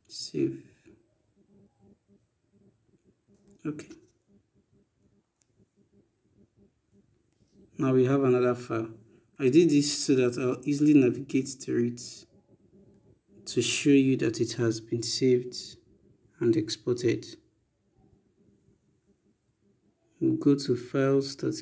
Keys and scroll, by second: 9.0 e.